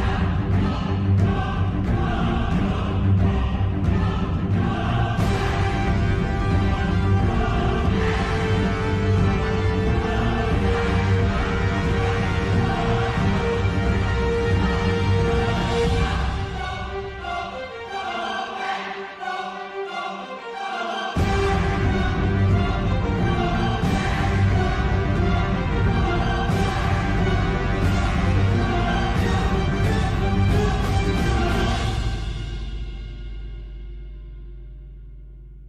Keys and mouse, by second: 2.2 click, 4.5 shift+click, 7.6 shift+click, 8.8 s, 12.5-14.7 middle drag, 18.3 KP_3, 19.3 3, 19.6 click, 20.7 s, 27.1 KP_7, 29.1 KP_3, 30.9 shift+middle click, 35.5 shift+middle click.